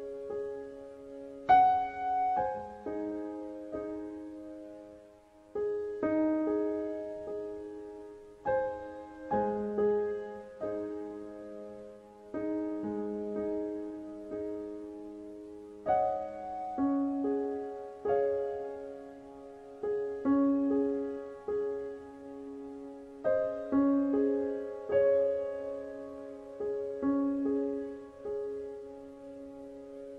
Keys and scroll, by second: 21.4 ctrl+z.